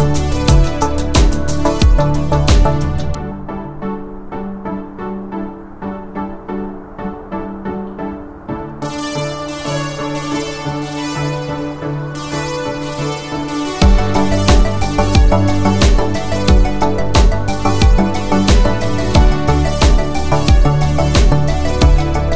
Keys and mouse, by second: 1.8 s, 5.9 g, 11.1-14.1 middle drag, 15.4 shift+middle drag, 15.9-17.6 middle drag, 18.5 click, 18.7 middle drag, 19.6-20.0 shift+middle drag, 20.2 Tab, 20.8 1, 22.1 click.